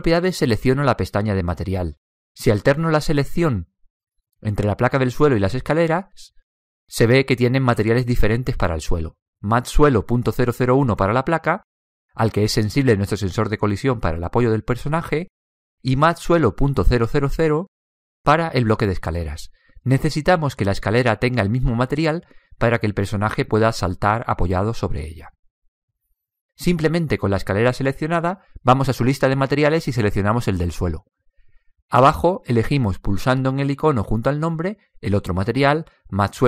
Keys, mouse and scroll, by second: 1.4 click, 3.5 right click, 5.1 click, 6.7 right click, 12.1 right click, 14.0 right click, 16.2 right click, 18.0 right click, 21.0 right click, 24.1 right click, 26.8-29.1 drag, 30.2 click, 32.4 click.